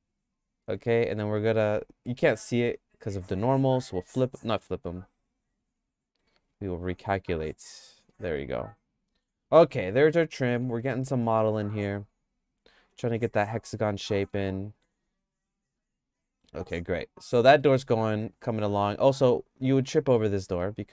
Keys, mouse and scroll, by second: 0.0 shift+middle click, 0.8 Tab, 1.3 a, 3.2 alt+n, 5.6 alt+n, 6.3 alt+n, 7.7 Tab, 8.1 middle click, 8.5-9.5 shift+middle drag, 10.5 g, 16.4 Tab, 16.6 Tab, 17.0 click, 17.4 middle click, 18.0-19.1 shift+middle drag, 19.7 click, 20.2 middle click, 20.6 shift+middle click.